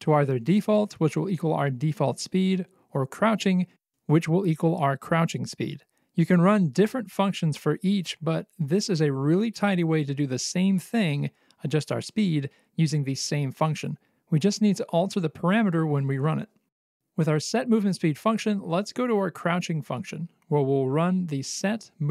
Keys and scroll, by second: 18.2-19.3 typing, 19.4 Return, 20.9-22.1 typing.